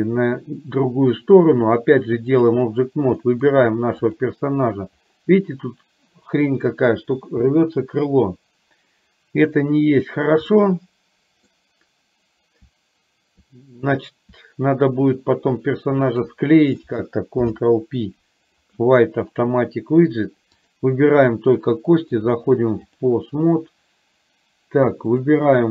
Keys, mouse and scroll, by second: 1.6-2.6 drag, 3.2 middle click, 4.1 click, 10.6-11.7 middle drag, 16.2 shift+click, 17.6 ctrl+p, 20.6 click, 22.5 click.